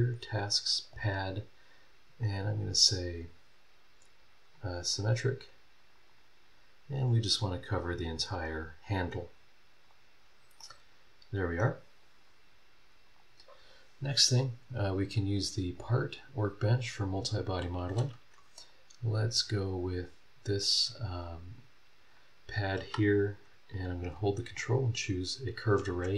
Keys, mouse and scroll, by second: 0.6 click, 2.3 click, 4.4 click, 4.9 click, 5.8-10.0 drag, 10.2 scroll down 1, 10.6 middle click, 10.7-11.7 right drag, 11.8 scroll up 1, 13.0 click, 15.7-17.1 drag, 18.6 click, 19.3 scroll down 1, 21.1 click, 24.5 ctrl+click.